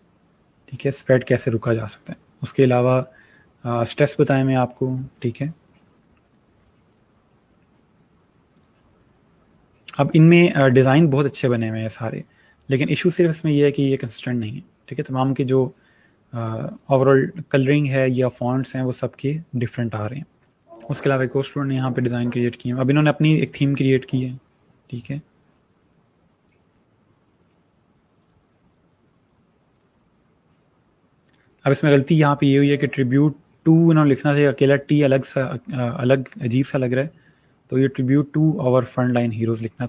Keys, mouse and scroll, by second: 2.0 click, 8.5 click, 13.4 click, 16.6 click, 20.5 click, 20.8 scroll down 1, 22.9 click, 26.4 click.